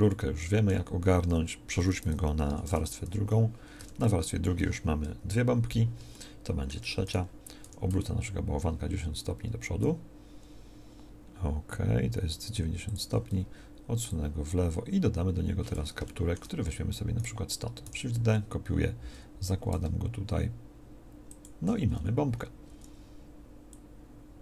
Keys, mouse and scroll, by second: 2.3 m, 3.7 2, 5.1 KP_1, 7.5 r, 17.7 shift+d, 21.9-24.4 middle drag.